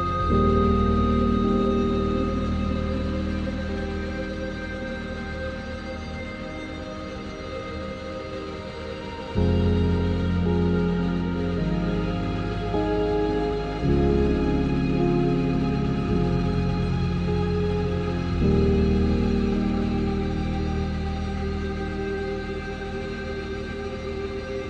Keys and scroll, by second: 14.6 ctrl+alt+z.